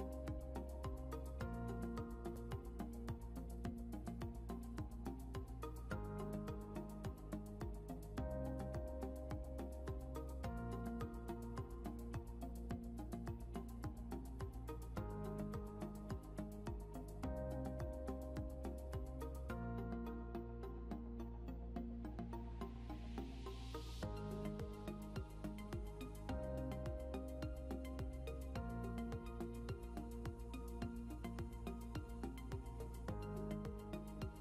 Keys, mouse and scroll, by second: 0.2 click, 7.2 scroll down 1, 8.9 click, 11.3 click, 16.8 right click, 20.8 click, 22.1 right click, 24.2 click, 25.1 right click, 26.2 click, 27.5 right click.